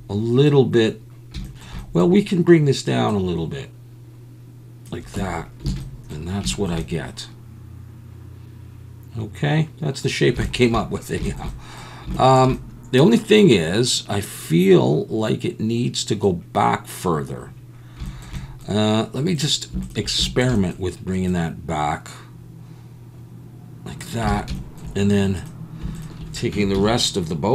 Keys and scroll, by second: 5.2 Tab, 5.8 alt+a, 24.3 alt+a, 26.6 Tab, 26.8 a.